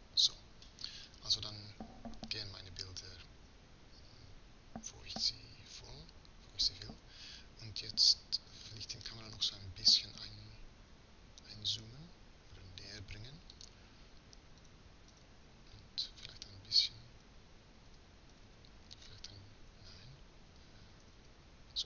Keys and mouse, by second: 9.9 s.